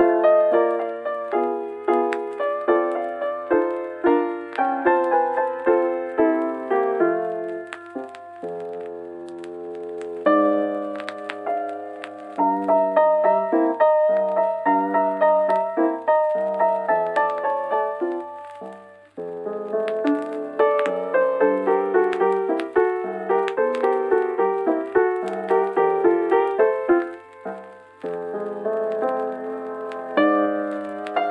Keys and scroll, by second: 7.1-8.0 scroll, 8.4-9.0 scroll, 9.8 scroll, 23.6 scroll, 25.4 scroll, 26.0 scroll, 26.8 scroll.